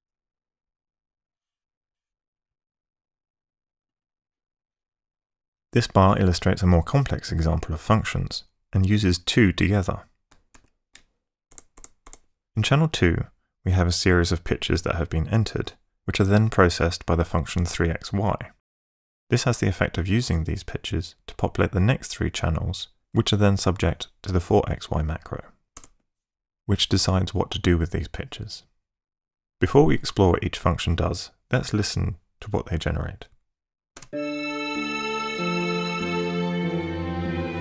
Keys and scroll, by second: 11.5 ctrl+shift+Tab, 25.8 Tab, 33.4 ↺, 34.0 space.